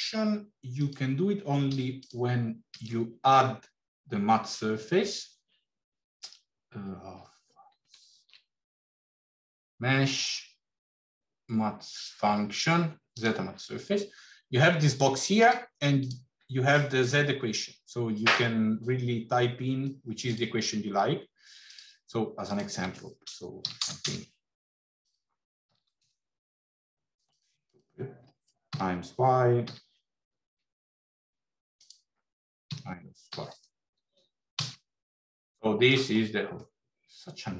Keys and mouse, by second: 1.5 x, 2.6 shift+a, 8.0 shift+a, 15.3-21.8 drag, 22.3-24.5 drag, 24.8-26.3 drag, 27.1-35.1 drag, 27.1-30.8 right drag, 35.0 right click, 35.5 click, 35.5 right click, 36.4-37.5 drag, 36.4-37.5 right drag.